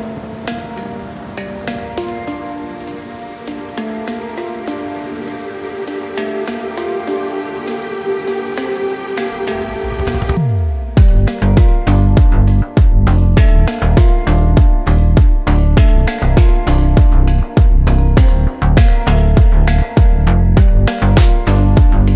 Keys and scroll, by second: 8.1 Tab.